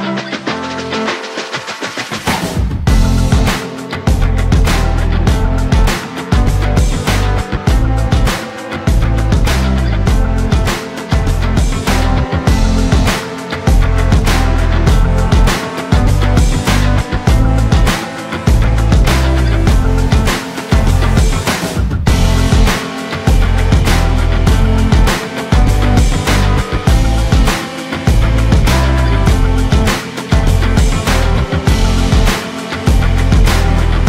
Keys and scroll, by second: 6.7 ctrl+z, 20.6 ctrl+z, 27.0 ctrl+z.